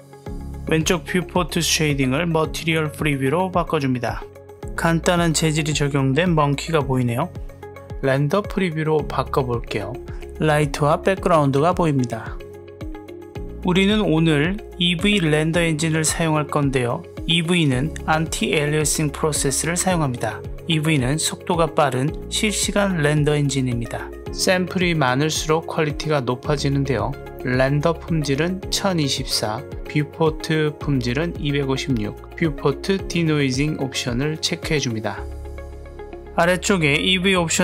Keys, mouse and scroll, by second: 0.3 click, 0.9 z, 7.8 z, 13.3 click, 14.3 click, 26.4 click, 27.1-28.9 drag.